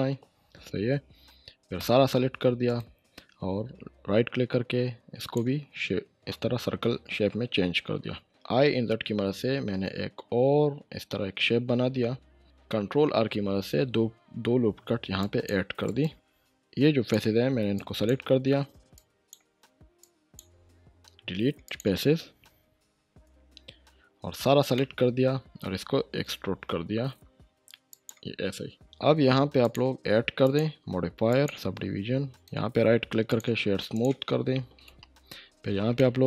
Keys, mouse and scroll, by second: 1.8 a, 2.7 right click, 5.2 click, 8.5 click, 12.4 click, 12.8 ctrl+r, 13.6-15.2 scroll up 1, 15.2 click, 15.8 right click, 16.6-17.4 click, 17.7-19.6 shift+drag, 24.3 click, 24.4 a, 24.7-25.7 middle drag, 26.2 e, 27.9 click, 29.6 click, 32.3 right click, 33.3 click, 34.8 Tab, 36.0-36.2 shift+middle drag.